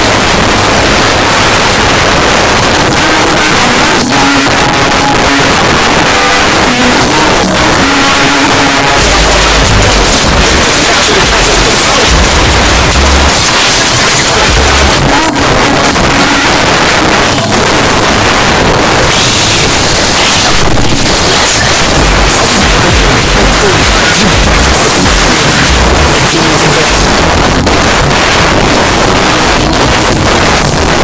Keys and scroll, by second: 0.9 n, 1.0 Down, 1.6-1.9 Down, 2.2 Down, 2.3 Return, 14.9 Page_Down, 27.1 Page_Down.